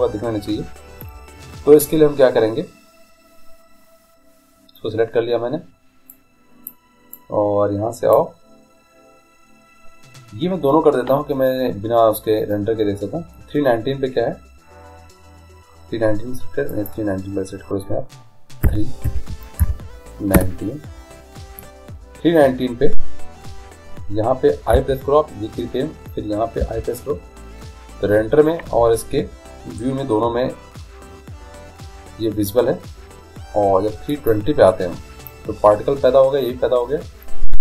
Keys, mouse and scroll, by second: 0.0 Escape, 6.2-8.9 drag, 17.1-18.6 drag, 24.7 i, 26.6 i, 34.2-36.0 drag.